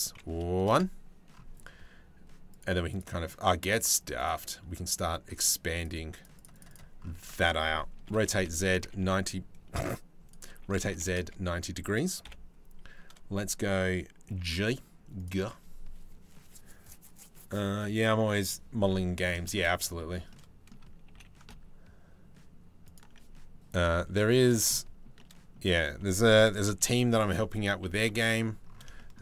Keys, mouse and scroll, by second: 2.1 click, 2.6 click, 3.6 click, 3.8 click, 5.4 click, 6.0 click, 6.1 click, 7.7 r, 10.2 r, 11.8 KP_7, 13.9 g, 18.5 middle click, 19.1 shift+middle click, 19.7 middle click, 20.7 g, 23.4 KP_Decimal, 24.3 shift+middle click, 24.8 shift+middle click, 25.2 click, 26.3 KP_3, 26.8 KP_1, 27.7 KP_3.